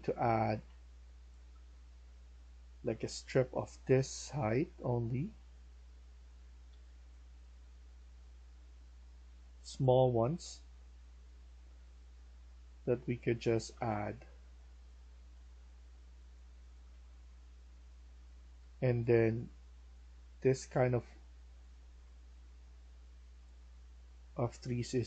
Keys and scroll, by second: 0.0-0.6 typing, 1.7-2.5 typing, 4.1-4.9 typing, 6.6-7.0 typing, 13.3-17.0 typing, 18.2-19.4 typing, 21.6 d.